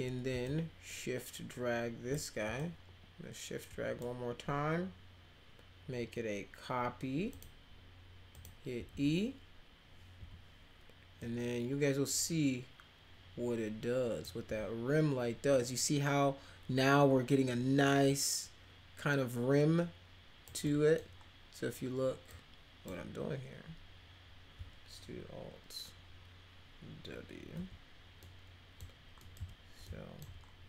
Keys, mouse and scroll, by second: 0.5-2.1 shift+drag, 2.6-4.0 shift+drag, 8.4 click, 8.8 w, 10.2 e, 11.2-14.3 drag, 14.4 w, 18.1-20.5 drag, 20.7 middle click, 22.3 click, 27.6 alt+w, 28.2 alt+middle click, 29.2 middle click, 29.9 alt+middle click.